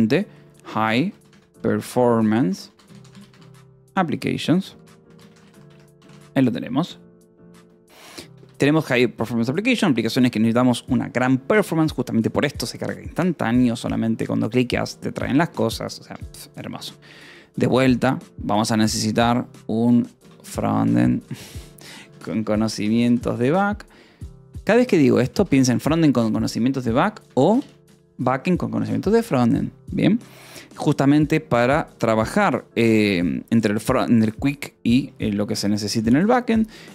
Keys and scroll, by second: 0.4-5.8 typing, 6.5 ctrl+s, 8.2 k, 8.8 j, 17.5 o, 18.5 -, 18.6 space, 20.1-27.2 typing, 27.7 Escape, 29.3 ctrl+s, 35.8 :, 35.9 space.